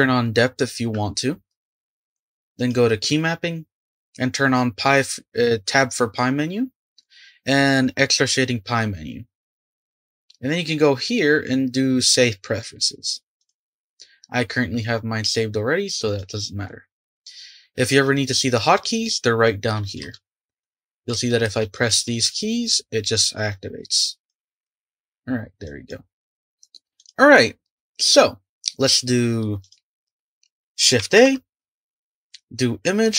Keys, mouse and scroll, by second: 17.8 click, 18.0 click, 18.2 click, 20.0 space, 20.6 click, 21.1 space, 21.4 space, 21.6 click, 21.9 space, 22.1 click, 22.2 space, 23.5-24.6 drag, 24.6 space, 25.6 click, 26.9 click, 28.1 click, 29.6 click, 32.8 shift+a.